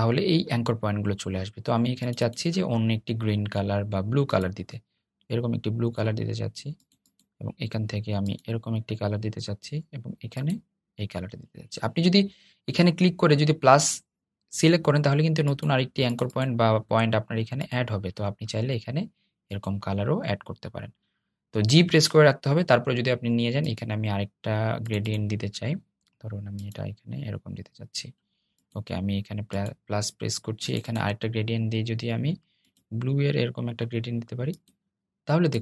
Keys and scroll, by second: 22.5 g.